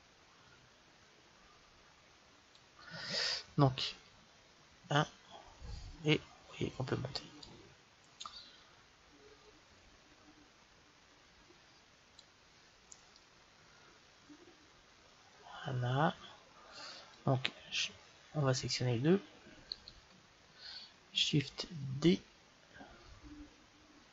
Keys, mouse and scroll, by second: 4.6 KP_1, 7.5-9.2 drag, 13.0-14.9 middle drag, 19.6-22.8 right drag, 22.8 shift+d.